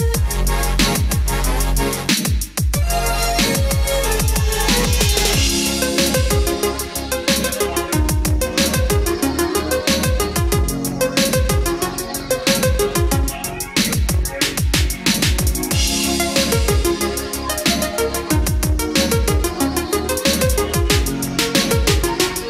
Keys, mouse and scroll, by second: 4.5-5.1 scroll down 1, 5.1 scroll up 1, 6.3 click, 9.4 click, 10.9 KP_1, 15.0 click.